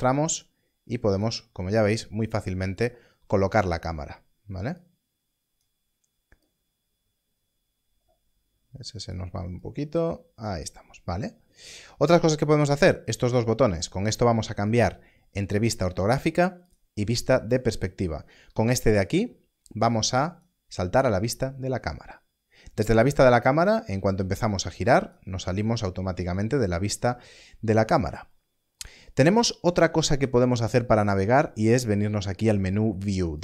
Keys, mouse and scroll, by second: 4.7 click, 14.6 click, 20.1 click, 23.6 click, 25.7-28.0 scroll up 1.